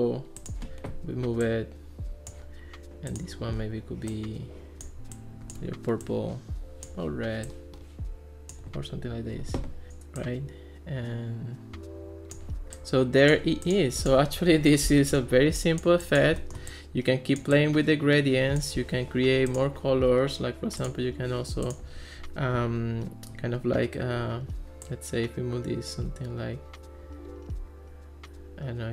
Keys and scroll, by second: 14.4 Escape.